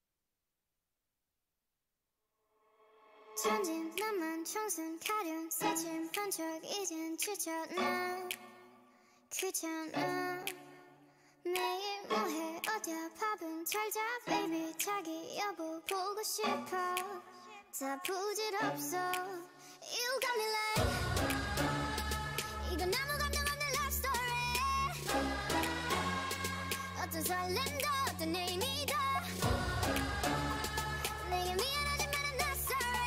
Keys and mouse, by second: 2.0 z, 3.6 ctrl+e, 4.9 a, 6.5-8.4 drag, 7.0 z, 8.1 ctrl+e, 9.2 a, 10.0 z, 11.2 ctrl+e, 13.7-15.0 drag, 16.0-17.8 right drag, 18.0 g, 19.4 Tab, 23.4 Tab, 26.0-27.9 drag, 31.9 ctrl+e.